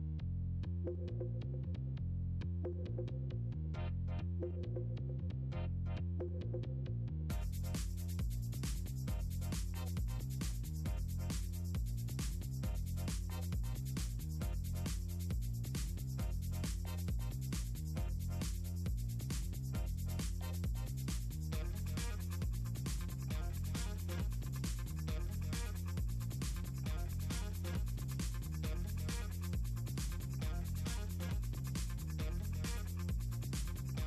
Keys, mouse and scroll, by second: 0.2 shift+click, 0.8 ctrl+scroll down 2, 1.3 middle click, 2.4 click, 3.2 middle click, 3.4 click, 3.6 middle click, 3.9-5.1 shift+drag, 5.3 middle click, 5.4 middle click, 5.9 ctrl+click, 6.8 middle click, 7.3 middle click, 10.2 click, 10.8 click, 16.3 click, 18.3 click, 20.4 click, 21.8-22.8 typing, 22.8 click, 23.2 drag, 23.7 click, 24.9 ctrl+z, 25.2 click, 25.8 click, 25.9 click, 26.3 click, 29.0 click, 29.4 click, 30.1 click, 32.0 click, 32.2 click, 32.5 click, 32.9 click.